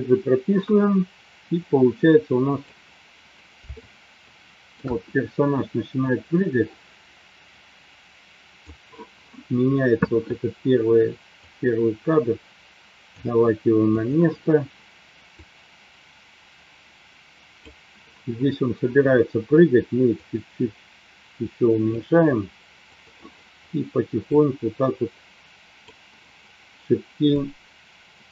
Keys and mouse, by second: 1.9-3.1 drag, 3.8 shift+middle click, 6.5-9.0 drag, 11.4-13.1 drag, 15.6-18.4 drag, 20.1-21.9 drag, 22.9 click, 24.6 click, 27.4-28.3 drag.